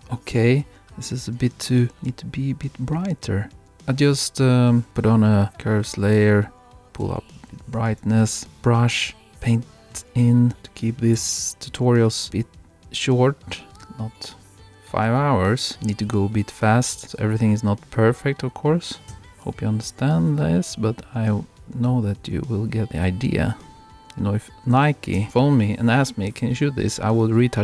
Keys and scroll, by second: 7.1 super+-, 25.2 super+-.